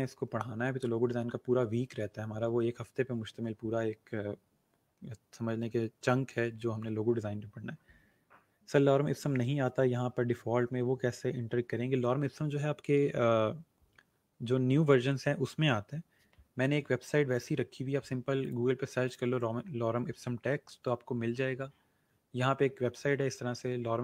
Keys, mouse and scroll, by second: 17.3 click, 23.2 scroll down 1, 23.6 scroll up 1.